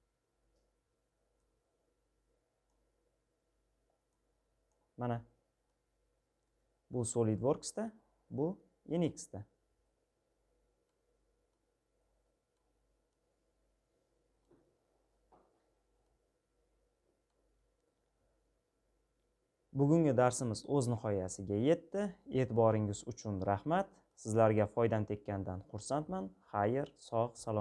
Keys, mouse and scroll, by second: 23.0-27.6 middle drag.